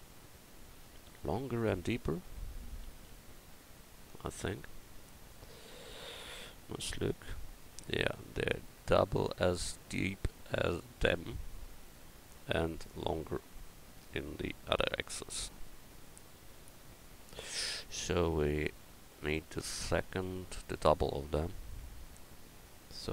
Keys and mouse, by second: 0.2 Tab, 2.3 KP_1, 22.4-23.1 right drag.